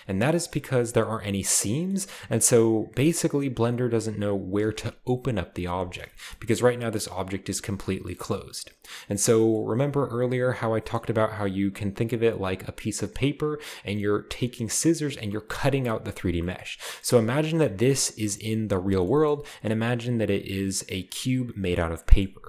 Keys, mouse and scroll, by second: 6.2-7.2 shift+middle drag, 6.4-7.2 shift+scroll up 1, 16.8-17.6 scroll up 2, 17.6 g, 18.6 right click, 19.3-20.2 shift+scroll up 1, 22.2-22.4 shift+middle drag, 22.2-22.4 scroll up 1.